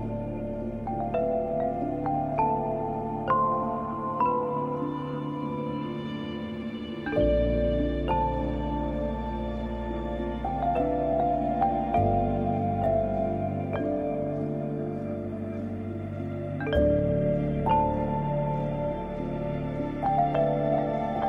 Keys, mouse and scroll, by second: 4.7 space, 4.8 click, 5.2 space, 5.4 click, 5.8 space, 5.9 click, 6.3 space, 6.9 click, 7.9 j, 8.7-14.6 drag, 14.6 z, 14.8-21.2 drag.